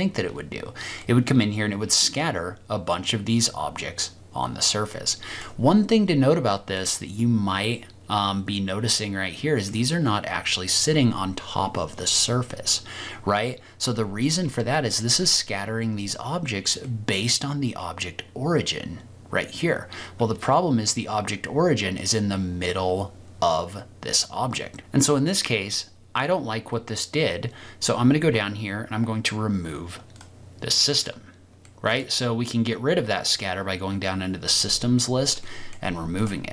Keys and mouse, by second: 1.1-3.8 middle drag, 3.6 click, 4.2 middle click, 4.3 click, 4.5 middle click, 6.7-9.6 middle drag, 16.8-20.8 middle drag, 31.6 middle click, 35.4 middle click.